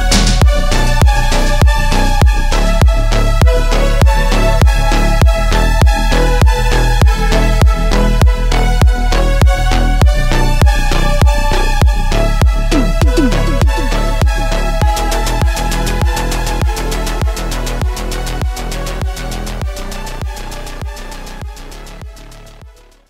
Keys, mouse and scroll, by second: 0.7-3.3 shift+drag, 6.3-10.4 drag, 9.1-9.8 shift+click, 10.7 scroll up 3, 11.5-14.5 ctrl+drag.